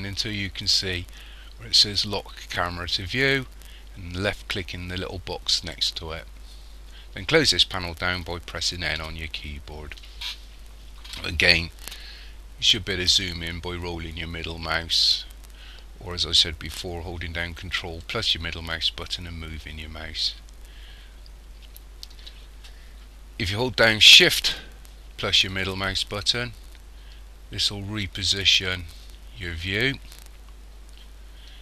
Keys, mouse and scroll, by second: 5.7 click, 9.0 n, 13.5-14.0 scroll up 1, 14.0-14.3 scroll up 3, 14.7-15.3 scroll down 5, 15.3 scroll up 3, 15.9-17.5 scroll down 2, 18.0 ctrl+middle click, 25.5 shift+middle click.